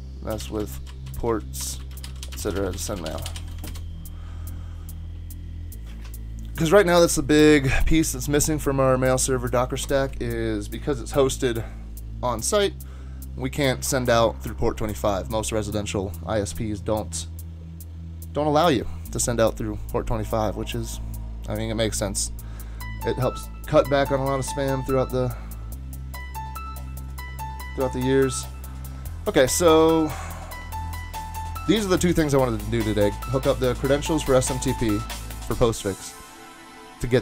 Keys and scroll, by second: 0.0-3.9 typing.